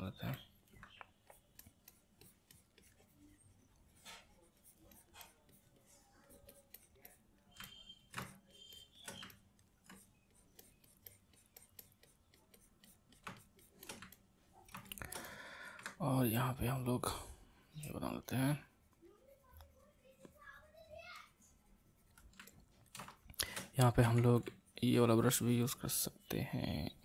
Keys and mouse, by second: 0.3 middle click, 1.3-7.6 drag, 7.6 middle click, 8.2-9.3 shift+drag, 9.3 middle click, 9.9-14.1 drag, 14.1-16.2 middle drag, 16.2-22.5 ctrl+drag, 22.5-24.0 ctrl+middle drag, 24.0 x, 24.6-27.0 ctrl+drag.